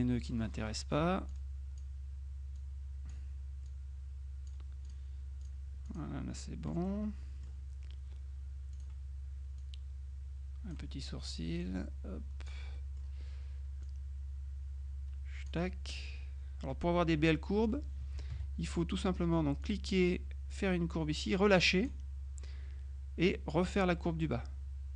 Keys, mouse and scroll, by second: 0.3 click, 1.4 click, 2.7-3.7 drag, 3.8-5.5 drag, 6.9-8.1 middle drag, 8.8 click, 9.7-11.3 drag, 11.7-13.1 drag, 13.9-16.0 drag, 18.4 ctrl+z, 19.7-22.5 drag, 23.6-24.9 drag.